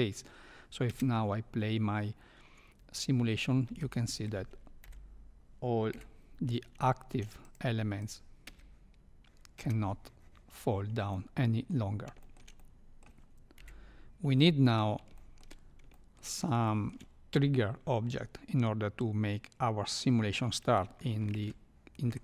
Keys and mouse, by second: 0.8 space, 3.6 space, 3.8 middle click, 4.8 KP_1, 5.9 KP_3, 6.9 shift+middle click, 7.5 drag, 8.0 click, 8.4 space, 9.5 space, 11.1 middle click, 12.2 shift+middle click, 12.5 middle click, 13.5 KP_3, 15.2 shift+middle click, 16.0 shift+middle click, 16.7 shift+middle click.